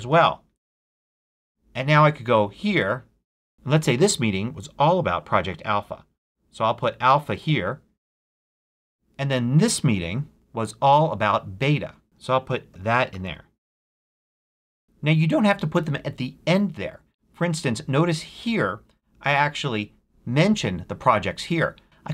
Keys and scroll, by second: 0.0-0.1 typing, 1.5 j, 1.8 BackSpace, 4.0-7.6 typing, 12.2-13.7 typing, 14.2 Return.